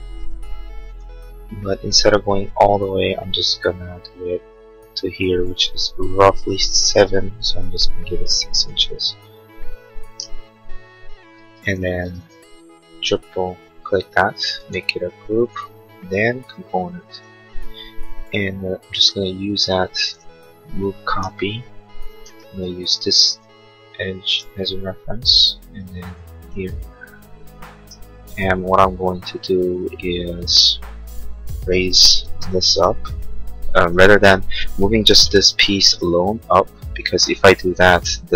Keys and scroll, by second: 0.2 p, 8.3 6, 11.3 space, 18.8 m, 22.5 Escape, 32.2 space, 33.9 Escape, 35.4 m.